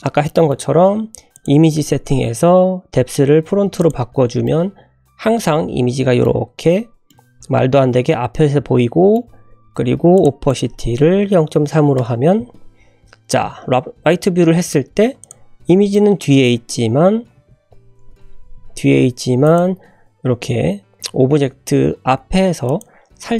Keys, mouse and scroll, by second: 0.2 shift+middle drag, 1.3 click, 3.8 click, 4.4-6.2 middle drag, 6.2-6.8 scroll up 4, 7.0-9.1 middle drag, 10.1 click, 10.4-12.4 drag, 12.8 `, 13.7-14.2 scroll up 2, 14.2 scroll down 1, 14.6 click, 15.2 click, 15.4-15.7 scroll up 1, 15.9 shift+middle click, 16.7 scroll up 1, 17.1 g, 18.9 s, 19.7-20.1 scroll up 3, 20.2 g, 22.9 scroll down 2.